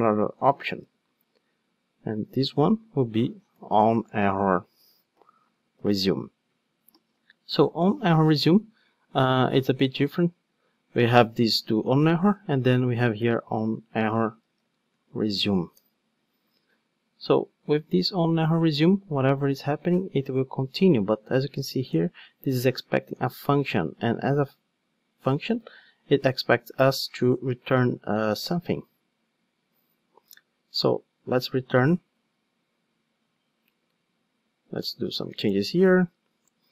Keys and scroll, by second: 15.8 Return, 23.1 super+p, 25.5 super+b, 27.5 super+v, 28.4 super+b, 31.2 ctrl+Tab.